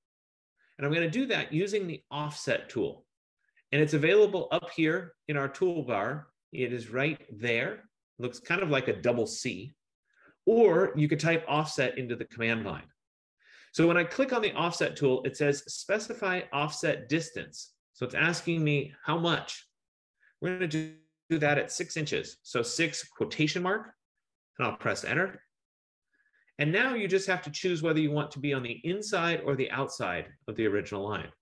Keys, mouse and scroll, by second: 11.7 click, 21.9 6, 22.7 shift+', 25.2 Return.